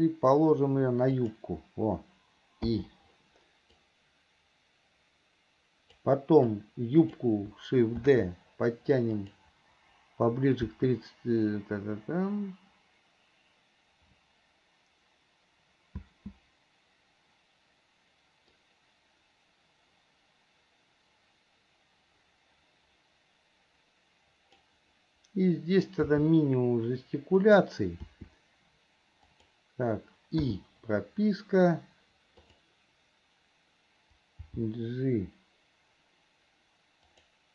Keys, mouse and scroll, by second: 4.0-6.3 drag, 6.7 click, 18.8-24.9 drag, 32.7 click.